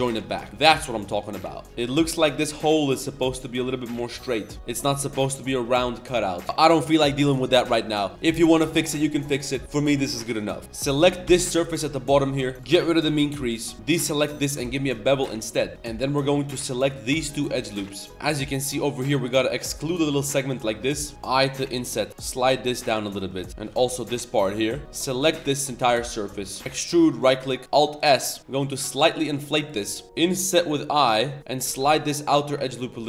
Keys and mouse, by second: 0.5-1.1 middle drag, 1.3 click, 1.6 click, 1.6-2.5 typing, 6.4 Tab, 6.4 ctrl+s, 6.4-7.3 drag, 7.3 middle click, 7.6 middle drag, 7.9 Tab, 8.1 middle click, 8.4 Tab, 8.5 middle click, 9.6 middle click, 10.6 Tab, 10.6 3, 10.6 1, 11.0 ctrl+KP_Add, 12.3 n, 12.5 n, 12.6 click, 13.4 middle click, 14.6 ctrl+b, 15.7 3, 16.4 alt+click, 16.9 alt+shift+click, 17.1 middle click, 17.8 middle click, 19.0 middle click, 22.1 g, 23.3 click, 23.5 g, 25.0 ctrl+shift+click, 25.5 middle click, 26.4 shift+middle click, 27.6 alt+s, 29.8 middle click, 30.1 i, 31.4 middle click, 31.4 1.